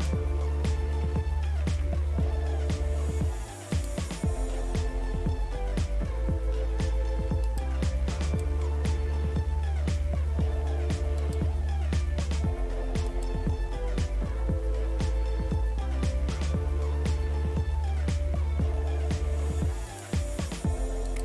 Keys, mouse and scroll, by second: 1.0 Delete, 1.4-1.8 typing, 3.7 click, 7.5 click, 11.2 click, 13.1 click, 19.9 click.